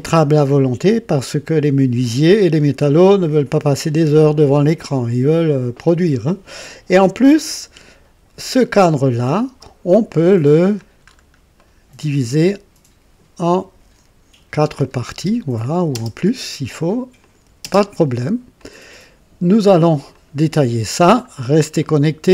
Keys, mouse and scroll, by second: 8.7 click, 9.5 space, 9.5 space, 10.1-10.9 drag, 11.1 scroll up 2, 11.6 right click, 12.4-13.6 drag, 14.7 click, 15.1 space, 15.9 space, 17.2 click, 17.6 space, 18.6-19.9 drag, 20.1 click, 21.2 scroll down 1, 21.8 right click.